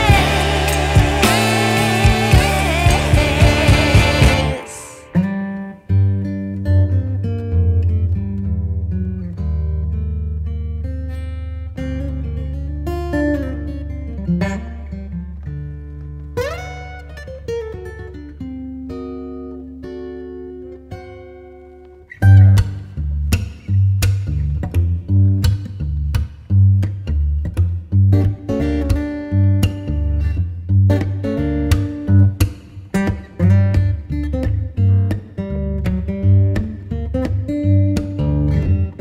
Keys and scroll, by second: 3.8 shift+super+i, 5.2 super+c, 6.3 super+w, 6.7 super+v, 7.2 v, 12.7 super+t, 31.6 Return, 34.0 super+j.